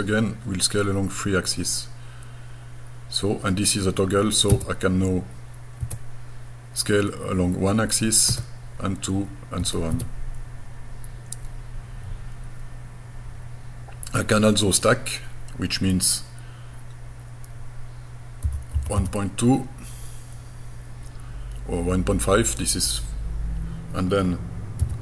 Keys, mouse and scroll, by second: 4.5 Tab, 5.8 Tab, 8.3 Tab, 9.6 Tab, 9.9 Tab, 18.5 KP_1, 18.7 KP_Decimal, 19.0 KP_5, 24.8 y.